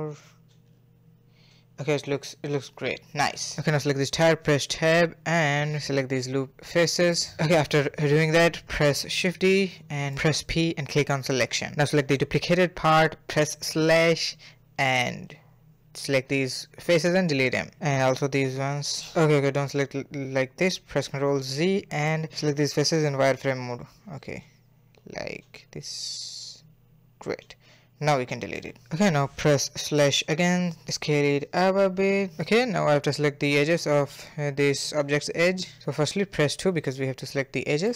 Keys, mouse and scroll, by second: 0.5 a, 0.6 a, 0.9 scroll down 3, 1.1-3.1 middle drag, 3.3 click, 5.2 3, 5.7 alt+click, 6.1 alt+shift+click, 6.5 alt+shift+click, 6.6 middle click, 7.1 alt+shift+click, 7.4-8.6 middle drag, 8.6 shift+d, 9.9 /, 10.2 p, 11.1 Tab, 11.3 click, 12.2 /, 12.8 /, 13.0 middle click, 13.0 KP_1, 13.5 Tab, 13.9 click, 14.7 middle click, 15.2 x, 16.6 middle click, 16.8 KP_3, 17.1 click, 18.1 x, 19.8 ctrl+z, 20.2 middle click, 21.0 KP_3, 21.7 z, 22.4 click, 23.9 click, 25.8 shift+click, 26.0 shift+click, 26.7 shift+click, 27.2 x, 28.1 z, 28.3 scroll down 1, 28.5-29.8 middle drag, 29.8 /, 30.2 a, 30.3 s, 30.8-35.5 middle drag, 35.8 2, 36.8 alt+click, 37.5 alt+click.